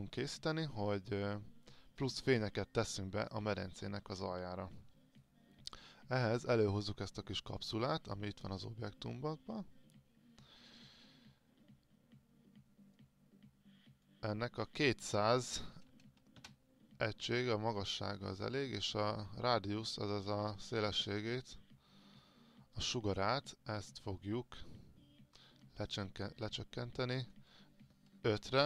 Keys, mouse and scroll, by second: 15.8 KP_2, 28.5 KP_5.